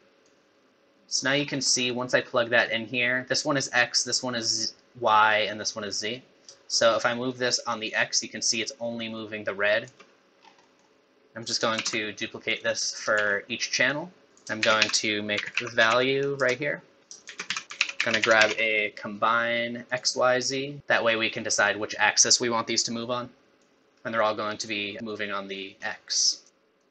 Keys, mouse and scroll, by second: 1.4-1.7 scroll up 5, 1.7 middle click, 2.1 scroll up 2, 2.4 middle click, 6.8 shift+click, 10.4 scroll down 4, 10.7 middle click, 11.4 click, 11.8 shift+d, 13.2 shift+d, 14.3 middle click, 14.3 click, 14.6 shift+a, 17.0 middle click, 17.2 shift+a, 23.6 click, 26.4 click.